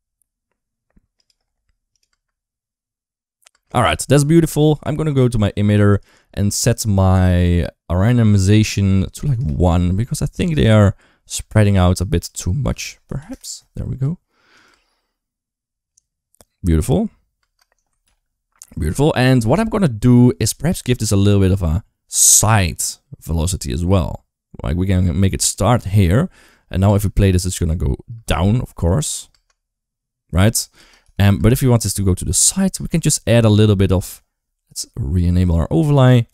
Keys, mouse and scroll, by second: 1.7 click, 1.9 space, 3.3 space, 8.5 click, 10.2 space, 11.2 space, 12.1-13.1 drag, 14.4 click, 14.5 space, 17.2 space, 18.4 ctrl+s, 20.8 g, 26.7 space, 27.9 space, 28.2-28.6 middle drag, 29.1 space, 30.6 space, 30.8 KP_0, 31.2 space, 32.5 space, 32.8 middle drag, 33.8 middle drag, 35.3 click.